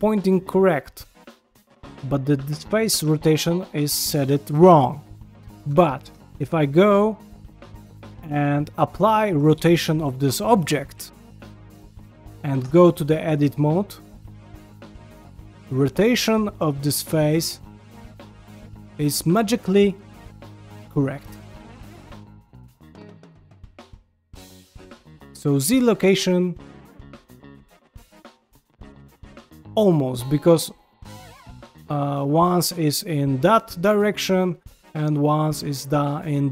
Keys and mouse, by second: 1.4 middle click, 2.8-5.6 middle drag, 5.7 ctrl+middle click, 6.1 Tab, 6.6 g, 10.9 ctrl+a, 12.6 Tab, 13.2 g, 15.5-18.8 middle drag, 20.7 g, 22.3-26.0 middle drag, 26.7 g, 28.0 middle click, 28.9 middle click, 29.4 g, 30.2-32.3 middle drag, 32.8 middle click, 33.9 middle click, 34.3 g, 35.3 middle click, 36.3 middle click.